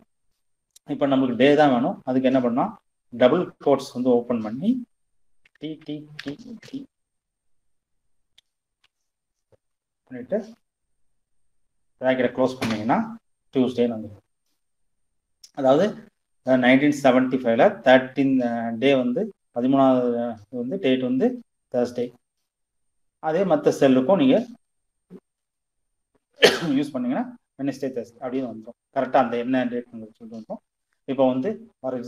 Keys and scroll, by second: 2.5 shift+', 4.5 d, 7.7 shift+', 9.5 shift+0, 11.6 Return.